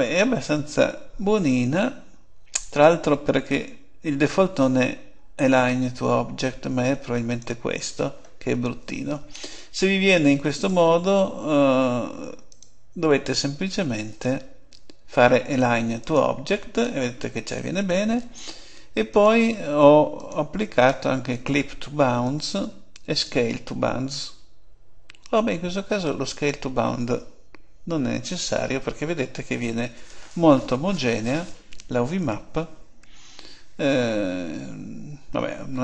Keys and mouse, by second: 2.5-3.7 drag, 10.5-12.2 drag, 14.0-15.8 drag, 19.0-24.9 drag.